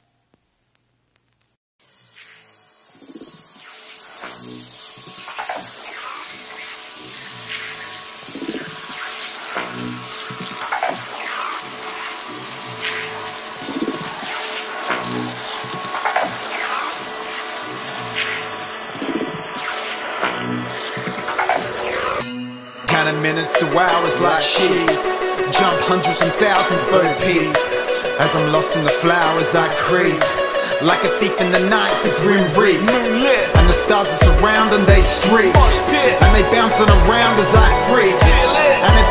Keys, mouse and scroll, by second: 1.3 g, 6.3 Escape, 6.6 F11, 6.7 F10, 7.0 right click, 8.5-11.9 typing, 12.2 Return, 13.0 right click, 13.4-17.9 drag, 19.8 right click, 20.6-21.1 scroll down 1, 22.3 click, 28.4-29.6 typing, 30.1 click, 31.1 right click, 31.4-31.7 typing, 31.8 Return, 32.9 click, 36.9 right click, 37.8-39.1 typing.